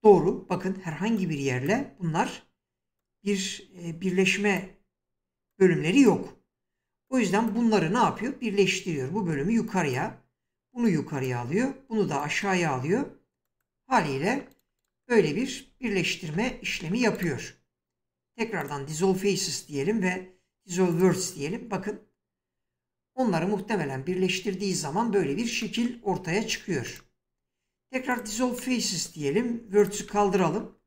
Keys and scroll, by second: 0.1 <, 8.3 <, 15.7 ctrl+z, 26.0 ctrl+z.